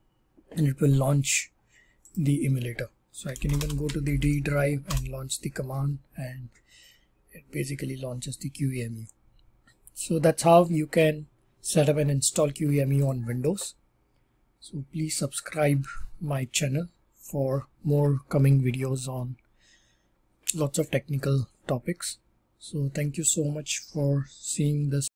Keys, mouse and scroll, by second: 0.7 typing, 2.0 click, 3.0-4.4 typing, 4.8 Up, 7.2 typing, 8.6 typing, 13.0-18.0 drag.